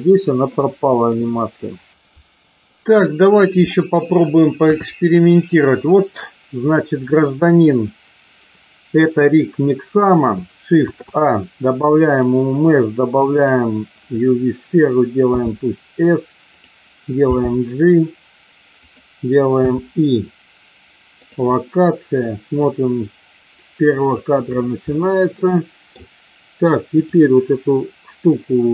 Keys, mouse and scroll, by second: 2.6 middle click, 4.6 KP_3, 5.4 shift+middle click, 10.8 shift+a, 15.3 s, 16.4 click, 17.3 g, 18.8 click, 19.4 i, 22.7-24.1 drag, 25.5 middle click, 26.9 click.